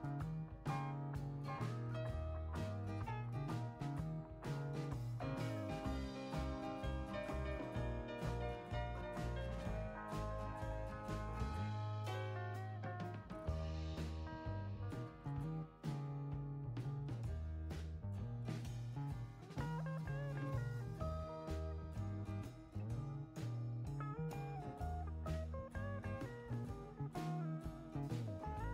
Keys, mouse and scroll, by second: 0.0 0, 0.2 0, 0.8 Return, 3.4 click, 4.9 ctrl+click, 6.2 ctrl+click, 9.8 click, 12.9 click, 13.9 click, 15.2 click, 15.9 ctrl+click, 17.2 ctrl+click, 20.1 click, 21.2-23.1 drag, 23.5 click.